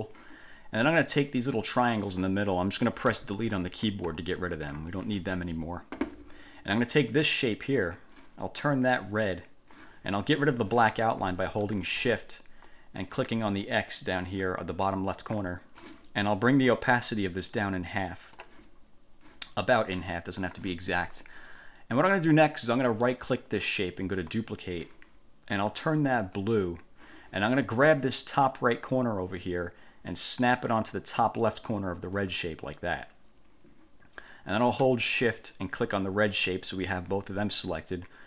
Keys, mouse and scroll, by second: 1.4-2.6 drag, 3.2 Delete, 3.6 click, 4.2 Delete, 4.6-5.2 drag, 5.1 Delete, 7.2 click, 9.2 click, 12.8 click, 15.4 shift+click, 17.4-18.8 drag, 20.3 click, 21.6 click, 23.2 click, 24.5 click, 26.4 click, 29.6-31.8 drag, 36.0 shift+click.